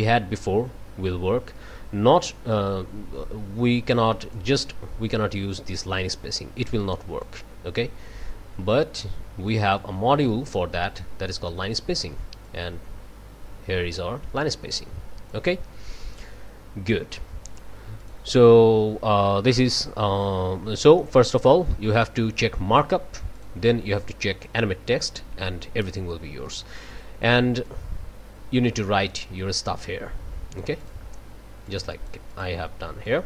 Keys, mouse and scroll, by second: 4.3-7.4 drag, 8.5-9.0 scroll up 2, 9.0 middle click, 9.5 click, 12.4-15.5 drag, 18.0 click, 19.7 scroll down 1, 20.7-23.3 scroll up 1, 23.3 click, 26.4 click, 27.6-31.1 drag, 31.7 click, 33.0 click.